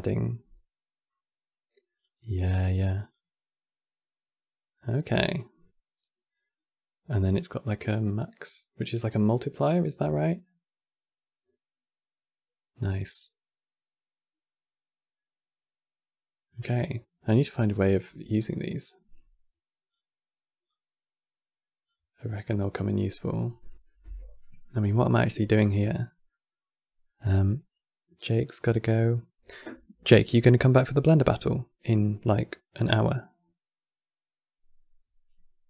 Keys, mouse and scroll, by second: 2.8-8.2 drag, 17.1-17.5 scroll down 5, 17.5-18.5 middle drag, 18.5 click, 20.4 click, 21.8 scroll down 2, 22.1-23.2 middle drag, 23.2 scroll down 3, 23.3-29.0 middle drag.